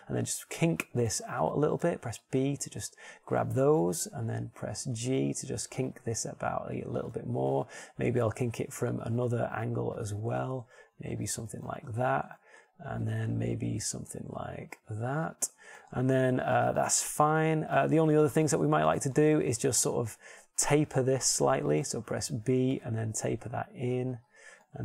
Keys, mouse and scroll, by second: 1.0 g, 2.3-3.9 drag, 3.1 a, 3.5 b, 6.7 g, 9.7 KP_1, 11.4 KP_3, 12.8 g, 15.3 a, 15.7 b, 16.3 g, 17.0-19.8 drag, 18.3 Tab, 21.3 Tab, 22.2 z, 23.5 a, 24.1 b.